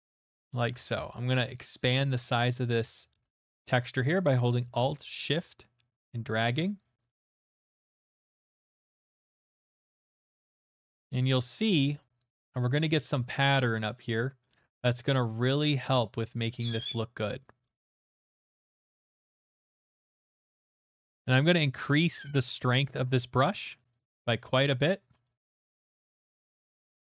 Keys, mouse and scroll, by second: 0.6 middle click, 0.6 alt+right click, 1.1 ctrl+right click, 2.0 alt+right click, 2.5 shift+right click, 3.9 alt+shift+right click, 6.3 alt+shift+right click, 8.3 alt+right click, 10.3 click, 10.4 click, 10.5 click, 10.7 click, 10.8 click, 11.2 alt+middle click, 11.2 click, 11.5 click, 11.7 click, 11.9 click, 12.2 click, 12.4 click, 13.0-18.6 drag, 18.8 alt+right click, 19.1 click, 19.2 click, 19.4 click, 19.6 click, 19.8 click, 19.9 click, 20.1 click, 20.3 click, 20.5 click, 21.5 scroll, 22.5 middle click, 22.8 click, 23.5 click, 24.1 click, 24.4 click, 24.8 click, 25.1 click, 25.2 click, 25.4 click, 25.5 click, 25.7 click, 25.8 click, 26.2 click, 26.4 click.